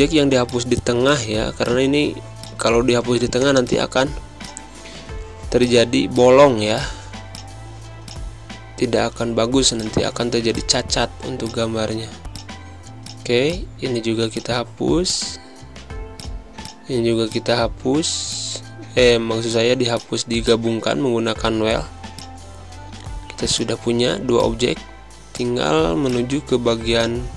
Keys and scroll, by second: 0.9 z, 2.1 space, 2.7 v, 4.4 space, 7.3 space, 14.3 z, 15.1 v, 17.1 z, 18.3 v, 20.4 z, 21.4 space, 23.5 v.